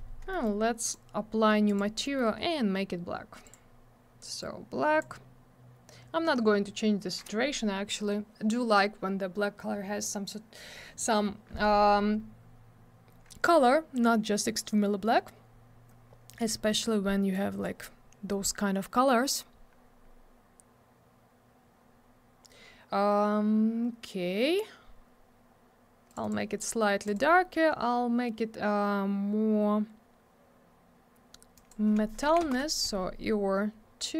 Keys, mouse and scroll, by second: 0.3 middle click, 0.4 middle click, 0.6 scroll up 1, 0.8 click, 0.9 double click, 1.7 click, 1.7 click, 2.0 middle click, 2.1 double middle click, 3.4 click, 3.5 click, 4.4 click, 17.3 click, 26.1 click, 26.1 click, 26.2 click, 26.3 double click, 27.0 click, 27.1 click, 31.5 click, 31.7 click, 32.2 2, 32.4 Return.